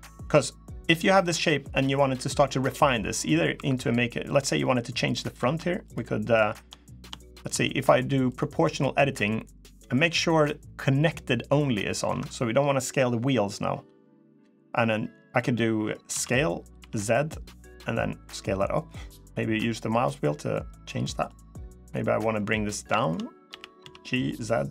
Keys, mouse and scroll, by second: 0.4 middle click, 1.0-1.7 scroll down 1, 2.4 middle click, 3.3 3, 4.0 click, 4.6-5.3 scroll up 1, 5.6 shift+click, 8.0 click, 10.1 click, 15.3 middle click, 15.9 s, 21.6 click, 22.7 shift+click, 23.2 g.